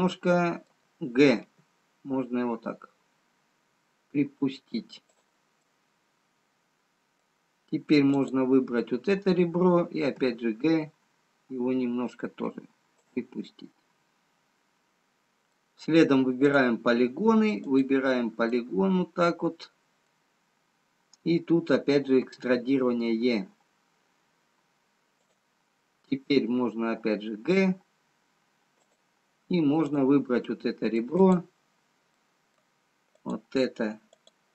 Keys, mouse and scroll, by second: 0.7 middle click, 1.9 g, 5.9 middle click, 9.2 click, 10.4 g, 13.9 middle click, 13.9-15.0 scroll up 1, 18.9 click, 18.9 middle click, 21.2 scroll down 1, 22.4 e, 26.5 g, 31.1 click, 31.1 middle click, 32.2 click, 32.2 middle click, 34.0 click, 34.4 click.